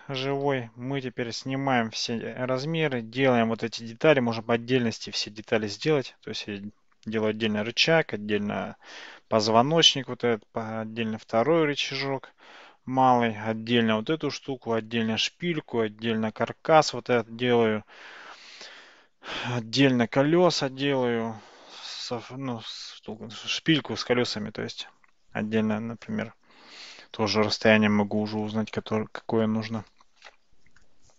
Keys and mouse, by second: 0.3 x.